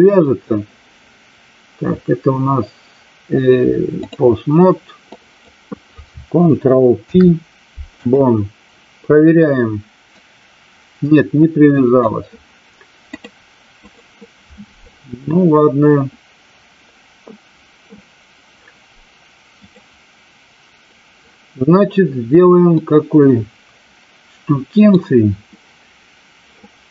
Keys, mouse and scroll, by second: 5.0-5.4 drag, 6.9 ctrl+p, 10.0-12.0 drag, 13.0-14.0 drag, 19.5 click, 22.8-24.9 middle drag.